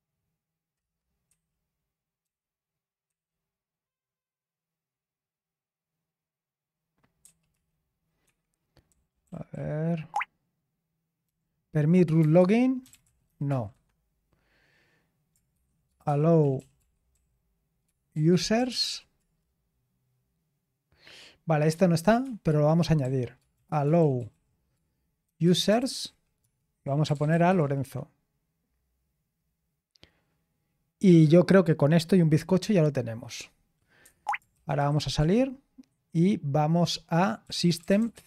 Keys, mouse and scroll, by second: 0.8 typing, 2.2-3.6 typing, 7.2 typing, 8.2 Escape, 8.6-10.0 typing, 11.2-14.2 typing, 15.3-19.3 typing, 22.2-28.3 typing, 29.4-31.1 scroll down 1, 32.3-33.0 typing, 34.0 Escape, 34.3-35.6 typing, 37.2-38.2 typing.